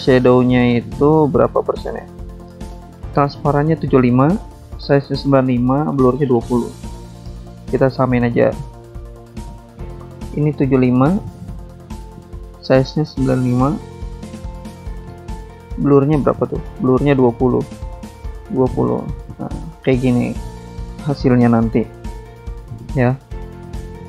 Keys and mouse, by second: 0.3 click, 1.3 click, 2.6 click, 5.3 click, 6.2 click, 7.4 click, 9.7 alt+Tab, 10.0 click, 10.8 click, 11.4 click, 12.2-12.6 typing, 13.2 click, 14.3 9, 16.0 alt+Tab, 17.3 alt+Tab, 18.1 click, 19.1-19.7 typing, 23.6 click.